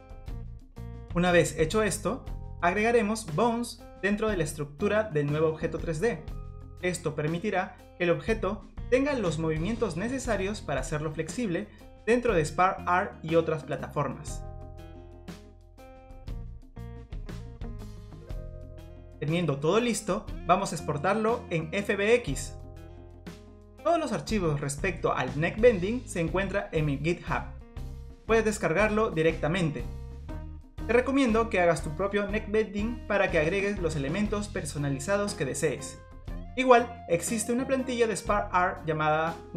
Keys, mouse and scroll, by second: 0.0-0.9 typing, 0.0 middle click, 0.1 scroll down 1, 0.3 middle click, 0.3 click, 0.4-0.9 shift+click, 0.5 shift+click, 0.5 click, 0.6 click, 0.7 scroll up 13, 0.8 click, 0.8 shift+click, 0.9 click, 0.9 middle click, 0.9-1.6 scroll down 17, 1.0 click, 1.1 middle click, 1.4 click, 1.5 scroll up 3, 1.6 middle click, 1.6 scroll down 3, 2.2 scroll up 1, 2.5 click, 3.1 scroll up 1, 3.2 scroll down 3, 3.2 middle click, 3.2-3.8 scroll down 2, 4.1 click, 4.8 scroll up 7, 5.0 click, 5.0 scroll down 2, 5.1 click, 5.3 middle click, 5.5 click, 5.6 click, 5.7 scroll down 3, 5.9 click, 6.0 click, 6.2 click, 6.3 middle click, 6.3 scroll up 2, 6.4 click, 6.4 scroll down 1, 6.4-6.7 scroll up 2, 6.5 click, 6.5 middle click, 6.5-7.0 click, 6.6 click, 6.7 scroll down 1, 6.8 click, 7.4 click, 7.6 click, 8.1 click, 8.3 click, 8.5 middle click, 8.5 scroll down 6, 8.7 click, 8.7 scroll up 2, 9.0 click, 9.1 click, 9.2 middle click, 9.4 click, 9.5 middle click, 9.5 click, 9.6 click, 9.7 click, 9.8 middle click, 10.2 click, 10.7 click, 11.0 scroll down 1, 11.0 click, 11.3 shift+d, 11.7 click, 11.8 Delete, 11.9 middle click, 12.1 click, 12.2-12.9 click, 12.4 click, 12.5 click, 12.7 middle click, 12.8 click, 12.9 middle click, 13.0 click, 13.1 click, 13.1 middle click, 13.3 middle click, 13.3 scroll up 2, 13.5 scroll down 2, 13.7 click, 13.8 scroll up 2, 13.8 middle click, 14.2 middle click, 14.3 scroll down 2, 14.4 click, 14.8 click, 15.0 shift+d, 15.1 click, 15.1 Delete, 15.2 middle click, 15.2 click, 15.4 click, 15.4 middle click, 15.5 click, 15.6 click, 15.8 click, 16.0 click, 16.1 click, 16.2 click, 16.3 middle click, 16.5 click, 16.6 click, 16.6 middle click, 16.7-18.1 click, 16.7 click, 17.6 click, 17.8 shift+d, 17.9 click, 18.1 middle click, 18.5 middle click, 18.5 click, 18.6 middle click, 19.2 click, 19.4 click, 19.8 click, 20.0 click, 20.0 click, 20.1 middle click, 20.7 click, 22.0 click, 22.0 a, 23.4 click, 23.7 click, 23.8 middle click, 24.1 r, 24.5 click, 24.6 r, 24.9 middle click, 25.1 click, 25.2 r, 25.5 middle click, 26.2 click, 26.3 click, 26.3 scroll down 6, 26.3 click, 26.5 click, 26.5 middle click, 26.6 click, 26.7 click.